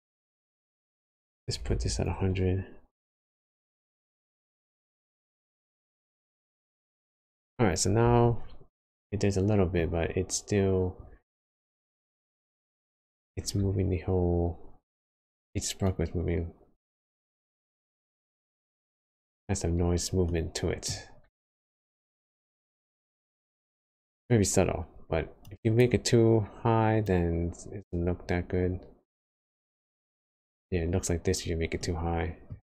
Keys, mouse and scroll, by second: 8.9 middle click, 10.0-10.6 scroll up 3, 16.3 click, 20.2 middle click, 21.3 space, 23.9 space, 25.4 click, 27.0 click, 29.8 space, 31.2-31.5 scroll down 4, 31.9 middle click, 32.5-32.6 scroll up 2.